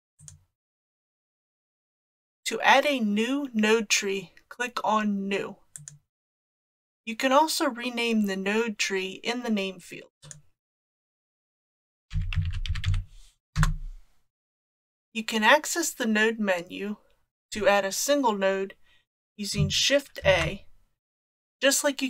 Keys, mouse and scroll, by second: 5.8 click, 10.3-14.5 drag, 20.2 shift+a.